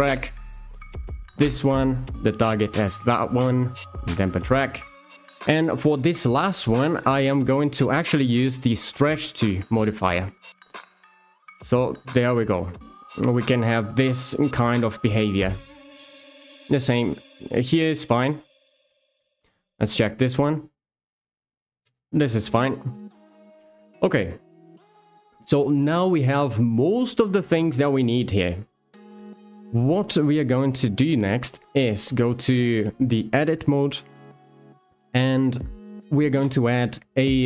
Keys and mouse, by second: 0.9 click, 1.1 click, 2.1 shift+click, 2.6 d, 5.5 click, 7.4 d, 10.8 click, 11.2 g, 16.6 g, 19.5 click, 19.7 click, 20.2 g, 23.0 click, 23.6 shift+middle drag, 30.2 shift+middle drag, 31.1 Tab, 33.7 click, 34.7 shift+s.